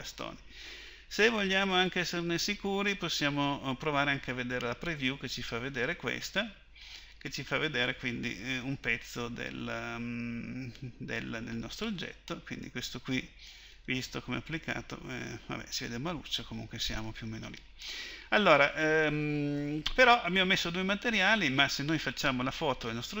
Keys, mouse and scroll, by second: 11.9-16.8 drag, 22.1-23.2 drag.